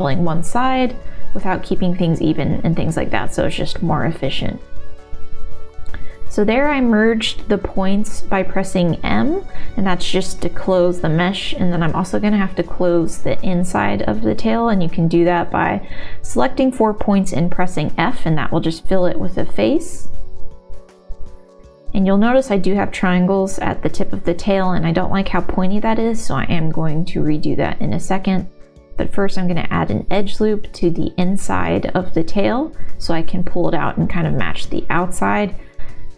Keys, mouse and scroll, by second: 1.2 r, 1.2 e, 2.1 s, 2.4 click, 2.5 e, 3.8 s, 4.4 click, 4.7 middle click, 5.4 m, 5.7 middle click, 7.1 3, 8.8 ctrl+KP_Add, 9.1 ctrl+KP_Subtract, 9.3 ctrl+KP_Add, 9.6 ctrl+KP_Add, 9.6 middle click, 10.2 ctrl+click, 10.6 middle click, 10.9 ctrl+click, 11.3 middle click, 11.9 s, 13.3 middle click, 14.1 middle click, 14.1 f, 15.3 shift+r, 16.2 click, 17.4 shift+click, 18.8 f, 18.9 shift+middle click, 19.1 middle click, 21.5 f, 22.1 middle click, 23.0 click, 23.9 shift+click, 24.0 f, 24.2 middle click, 24.9 middle click, 25.8 middle click, 26.5 g, 27.5 middle click, 27.9 click, 29.3 middle click, 30.8 ctrl+z, 31.3 KP_1, 32.1 g, 32.6 middle click, 32.9 click, 33.3 middle click, 34.3 KP_1, 34.3 g, 34.4 middle click, 35.0 ctrl+r.